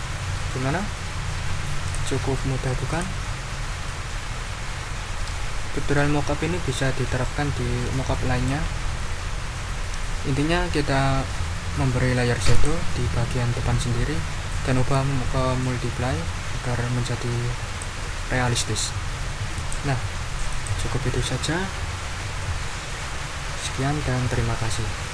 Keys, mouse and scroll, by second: 1.8 click, 2.9 click, 5.9 right click, 7.2 right click, 12.5 click, 14.9 click, 19.5 click, 19.9-20.5 scroll up 1, 20.5 click.